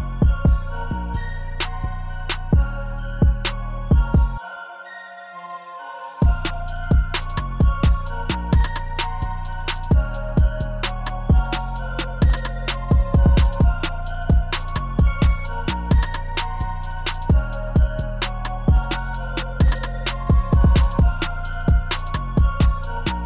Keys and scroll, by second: 17.7 2, 22.1-23.2 typing.